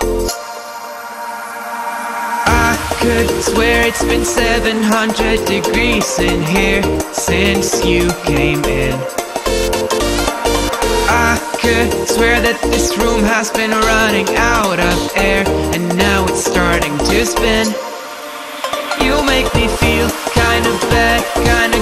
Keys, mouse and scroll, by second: 0.7 click, 1.3 ctrl+=, 2.2 ctrl+-, 3.2 click, 3.6 ctrl+-, 3.9 space, 4.0 click, 4.2-4.6 space, 7.5-8.5 drag, 10.8 click, 12.3 space, 12.5 click, 12.7-13.6 space, 14.0 click, 14.2-14.7 space, 15.6 click, 16.2 ctrl+-, 16.5-17.3 space, 17.4 click, 17.5-18.1 space, 20.0 click.